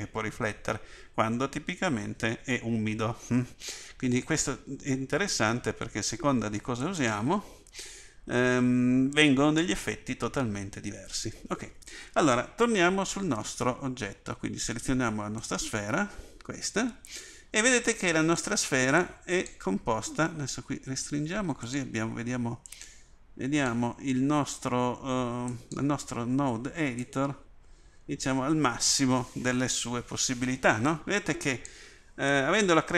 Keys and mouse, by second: 22.8-24.0 drag, 32.3 click.